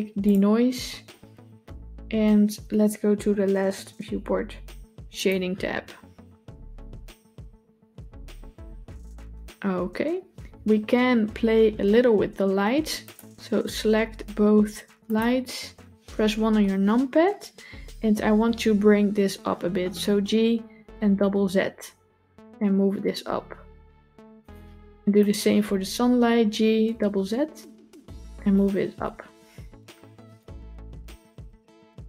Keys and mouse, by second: 0.1 click, 15.2 shift+click, 16.4 KP_1, 20.0 g, 25.2 click, 26.3 g, 28.9 KP_0.